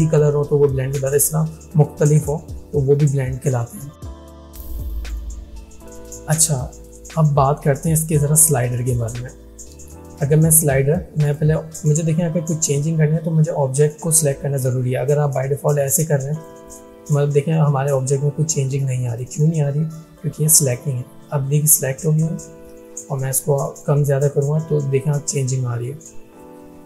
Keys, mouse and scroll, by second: 11.3 click, 16.1-19.3 drag, 23.0-24.0 drag.